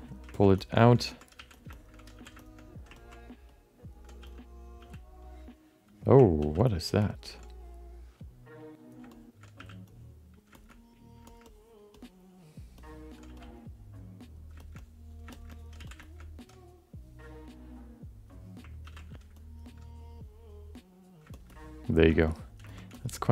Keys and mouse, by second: 0.3 ctrl+middle click, 0.5 shift+middle click, 0.7 middle click, 1.1 ctrl+alt+middle click, 1.3 f, 1.7 alt+shift+middle click, 2.1 f, 2.4 shift+middle click, 2.5 alt+middle click, 2.9 ctrl+alt+middle click, 3.5 alt+middle click, 4.2 f, 4.8 f, 5.2 click, 6.6 ctrl+z, 7.0 alt+middle click, 7.5-8.9 drag, 9.1 alt+shift+middle click, 9.5 f, 9.9 click, 10.5 shift+middle click, 10.7 alt+middle click, 11.3 shift+middle click, 11.4 alt+middle click, 11.9 alt+middle click, 12.8 middle click, 13.2 f, 13.7 click, 14.6 alt+shift+middle click, 14.8 alt+middle click, 15.3 alt+shift+middle click, 15.5 alt+middle click, 15.7 f, 16.0 middle click, 16.2 middle click, 16.9-18.3 drag, 19.1 ctrl+z, 19.4 alt+middle click, 19.8-21.1 drag, 21.3 shift+middle click, 21.4 alt+middle click, 22.1 alt+shift+middle click, 22.2 alt+middle click, 22.6 ctrl+middle click, 22.9 shift+middle click, 23.1 alt+middle click.